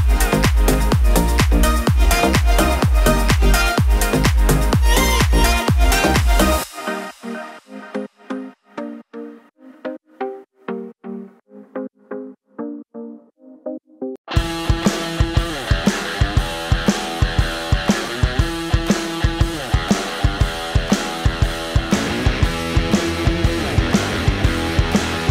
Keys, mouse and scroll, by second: 7.7-8.9 drag, 9.4 right click, 10.0 click, 13.1 space, 22.6 click, 22.8-23.3 drag.